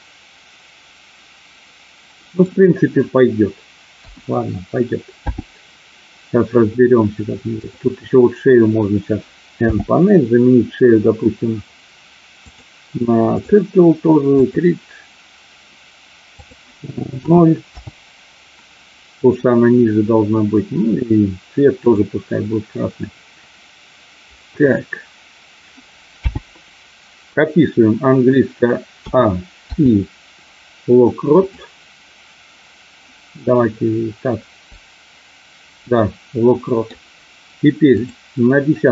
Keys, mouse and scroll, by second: 4.0 KP_1, 5.2 n, 7.5 click, 9.6 n, 12.5-13.5 drag, 14.2 click, 16.3-18.3 drag, 21.8 click, 26.2 n, 29.0 a, 29.6 i, 36.0 middle click, 38.0 click.